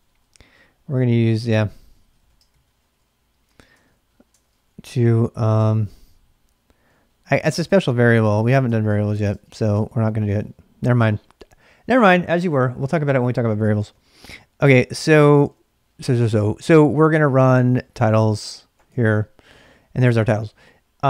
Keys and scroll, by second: 0.0-0.4 typing, 1.7-3.0 typing, 3.8 ctrl+[, 4.2-6.2 typing, 7.4 ctrl+[, 7.4 ctrl+j, 7.5-10.5 typing, 8.7 ctrl+[, 14.0 ctrl+a, 14.2 ctrl+a, 15.1 ctrl+a, 15.3 ctrl+a, 17.2-18.7 typing, 18.9 Return.